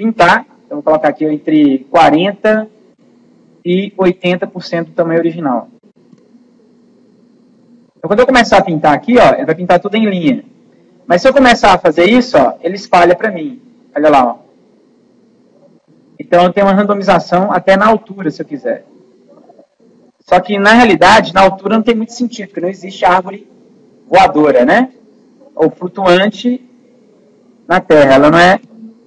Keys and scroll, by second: 1.9 4, 28.4 0.